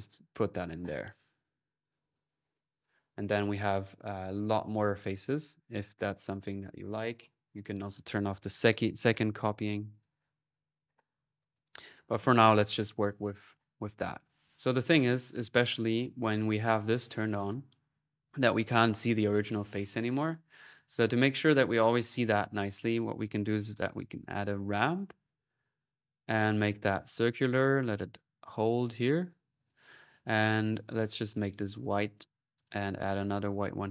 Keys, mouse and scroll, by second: 1.2-3.9 drag, 4.7 click, 6.3-7.3 drag, 9.3-10.0 typing, 9.7-13.5 drag, 10.1-11.6 middle drag, 14.0-14.7 typing, 14.1-17.2 ctrl+drag, 16.1-16.8 typing, 17.2 middle click, 17.3-18.7 drag, 19.8-22.3 drag, 22.7 right click, 23.1-24.6 typing, 24.5-26.1 drag, 26.5-29.4 drag, 30.8 click, 31.4 click, 32.5 click.